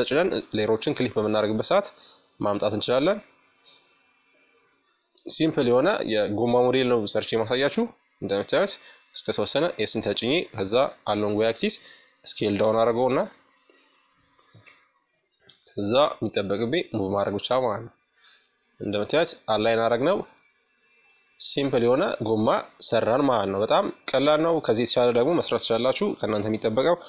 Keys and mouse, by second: 1.7-3.4 middle drag, 2.9 KP_5, 4.2-7.5 middle drag, 11.7-13.5 middle drag, 13.6-15.8 drag, 16.4-21.6 middle drag, 23.7 KP_1, 25.2-26.6 middle drag, 26.3 shift+d.